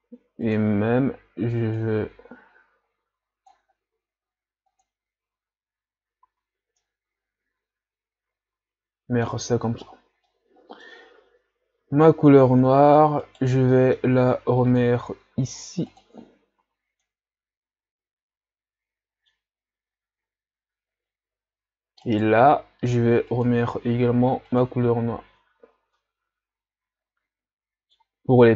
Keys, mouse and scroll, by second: 1.8 click, 2.7 click, 6.3 a, 6.8-12.1 middle drag, 12.1 scroll up 1, 13.3 right click, 13.9-16.2 middle drag, 16.2 click, 16.6 a, 17.0-20.0 middle drag, 20.0-22.1 scroll down 1, 22.1 right click, 24.8 click, 25.3 a, 25.6 scroll down 1, 25.9-28.5 middle drag.